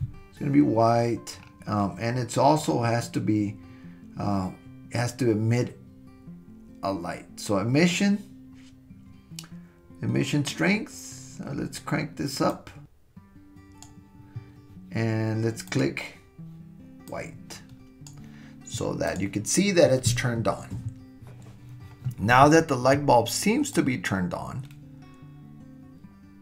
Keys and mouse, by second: 12.5-13.8 drag, 19.1 click, 23.8-26.4 drag.